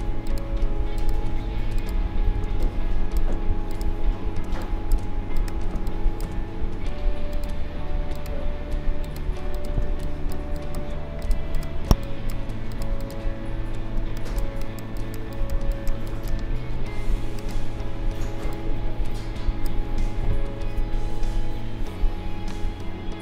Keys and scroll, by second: 2.4 space, 9.8 space, 14.0 space.